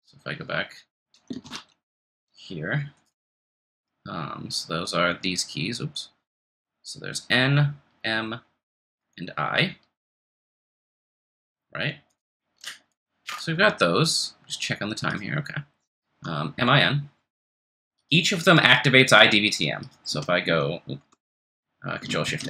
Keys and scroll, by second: 21.1 Escape, 22.3 ctrl+f, 22.3 3.